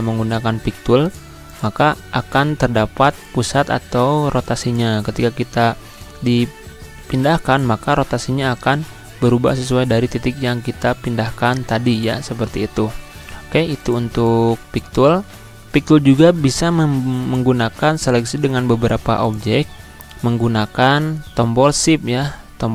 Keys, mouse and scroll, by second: 0.8-5.2 drag, 5.2 scroll down 1, 6.8 click, 6.9-12.7 drag, 12.7 ctrl+z, 13.6 click, 15.2 scroll down 1, 17.0 click.